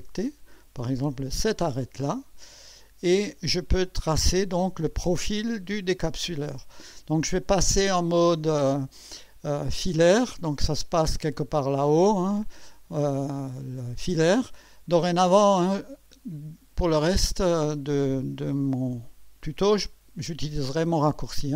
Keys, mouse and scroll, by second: 1.0 click, 2.1 scroll up 1, 2.7 right click, 12.1 click, 16.1 click.